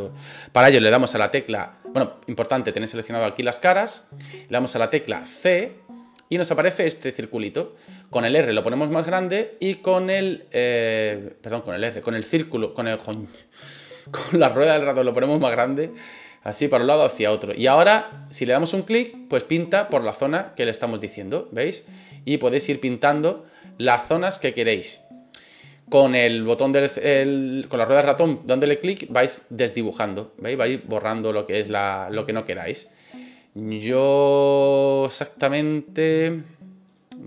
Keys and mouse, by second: 3.6 click, 5.4 c, 20.2-25.1 drag, 27.6 middle click, 28.3 middle click, 28.9 middle click, 30.9 middle click, 31.7 middle click, 32.7 middle click, 33.7 middle click, 36.8 middle click.